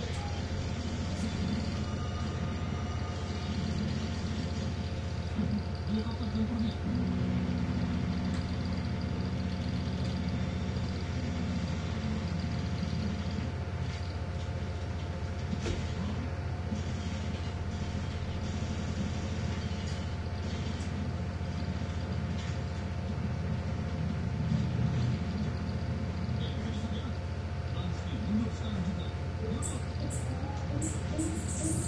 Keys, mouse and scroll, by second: 1.3 1, 3.0-4.8 drag, 5.8-7.3 drag, 8.0 ctrl+z, 9.6 click, 10.6-11.9 scroll up 1, 12.9 click, 14.0 click, 15.3 2, 15.8 Return, 17.3-18.5 drag, 18.9 click, 20.9-22.6 drag, 22.8-24.1 drag, 24.9-26.2 drag, 26.7 click, 28.4-29.5 drag, 29.5-30.3 scroll down 1, 30.8-31.3 scroll up 1.